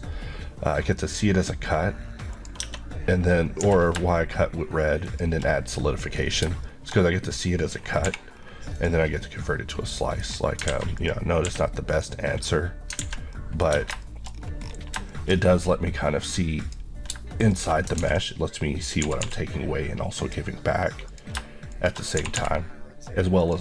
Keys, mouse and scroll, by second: 2.4 click, 2.6 Tab, 3.7 g, 5.1 shift+click, 5.9 scroll up 1, 6.4 shift+scroll up 1, 6.7 shift+middle click, 7.1 scroll up 1, 7.8 scroll, 7.9-8.5 scroll down 2, 8.1 h, 8.8 click, 9.2-9.5 scroll down 1, 9.5 middle click, 10.7 alt+a, 11.0 click, 11.5 q, 12.0 click, 13.1 alt+a, 13.4 middle click, 13.7 Tab, 14.1 shift+middle click, 14.4 scroll up 1, 15.0-15.7 shift+scroll up 3, 15.2 shift+middle click, 16.7 click, 18.1 ctrl+x, 18.9 click, 19.1 typing, 20.3 click, 21.8 shift+click, 22.2 typing, 23.5 click.